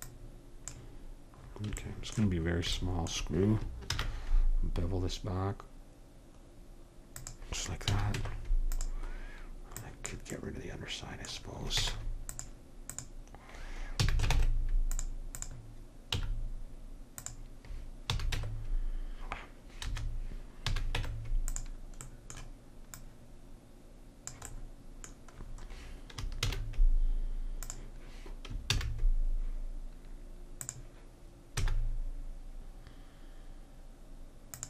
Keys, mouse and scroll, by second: 0.0-1.4 drag, 1.4 middle click, 4.0 ctrl+b, 7.9 a, 8.2 Tab, 9.8 click, 10.4-11.8 drag, 11.8 Tab, 14.0 a, 14.3 ctrl+Tab, 16.2 x, 18.1 a, 18.3 Tab, 20.7 a, 20.9 Tab, 23.0-24.3 drag, 24.5 click, 24.8-26.4 middle drag, 26.4 shift+s, 28.7 shift+a, 31.6 s.